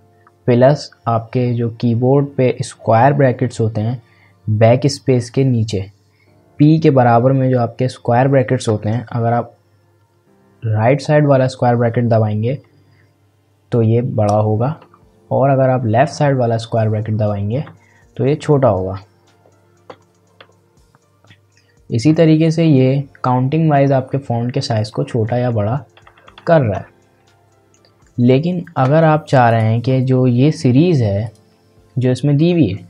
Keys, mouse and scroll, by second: 12.6 ctrl+], 14.8 ctrl+[, 17.7 ctrl+], 19.9 ctrl+[, 22.6 ctrl+], 24.9 ctrl+[, 29.5 click.